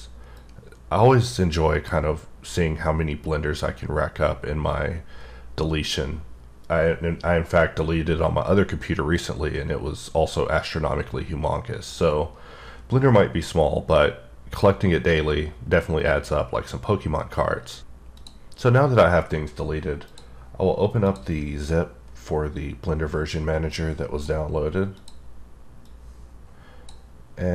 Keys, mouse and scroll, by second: 0.3-1.9 drag, 23.0 click, 23.7 click, 25.0 click, 25.9 click.